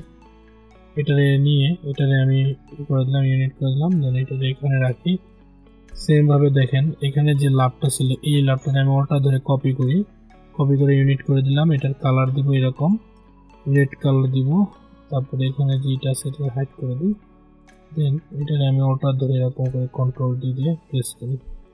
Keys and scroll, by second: 19.9 ctrl+d.